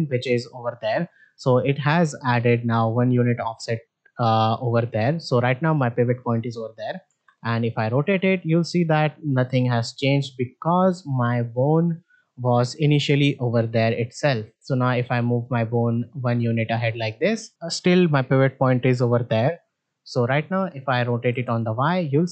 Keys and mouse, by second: 7.0 r, 12.4-12.7 middle drag, 12.4 click, 14.5-15.9 drag, 16.2 middle click, 16.6 shift+middle click, 17.1 middle drag, 20.0 middle click, 21.2 r.